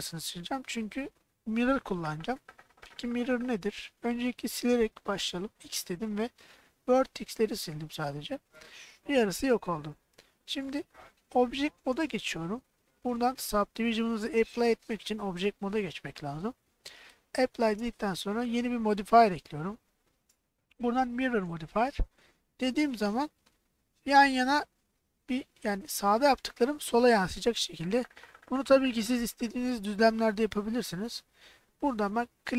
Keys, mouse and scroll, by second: 5.5 x, 10.9 middle click, 12.0 Tab, 13.6-17.2 drag, 18.8-21.2 drag.